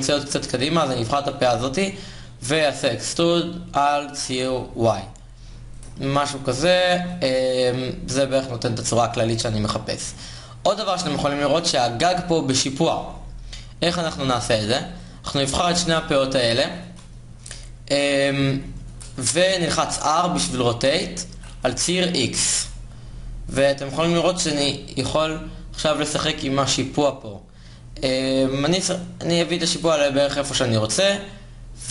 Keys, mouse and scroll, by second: 2.3 e, 5.4 click, 19.7 r.